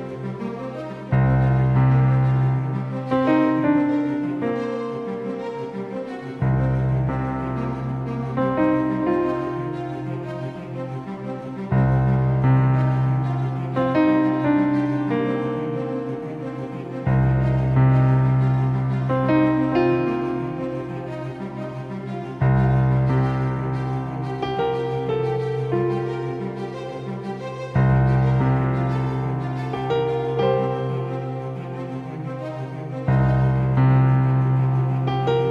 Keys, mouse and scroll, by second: 25.0-26.6 middle drag, 26.6 click, 26.8-28.8 middle drag, 33.5-35.5 middle drag.